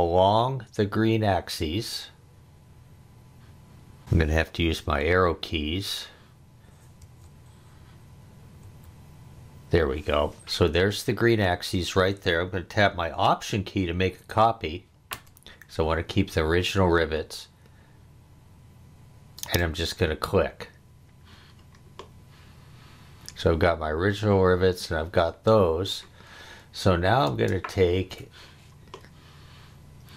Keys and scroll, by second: 5.0 Up, 7.0 Right, 8.6 Left, 27.3 space.